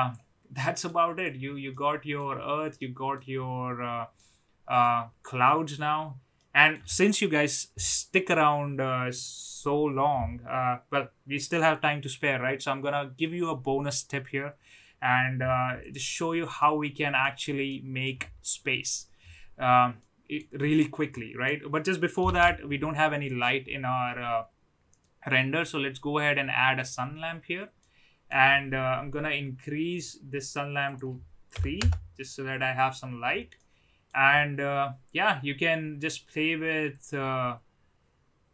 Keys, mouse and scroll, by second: 0.5-0.9 middle drag, 1.7-2.1 middle drag, 2.8-3.1 middle drag, 4.1-4.7 middle drag, 5.2-5.7 middle drag, 6.3 middle click, 15.8 click, 16.6-17.1 middle drag, 17.6-18.0 middle drag, 20.0 middle click, 21.1 middle click, 22.3 shift+a, 27.9-28.3 middle drag, 31.0-32.3 drag, 33.7 middle click, 37.0-38.5 drag.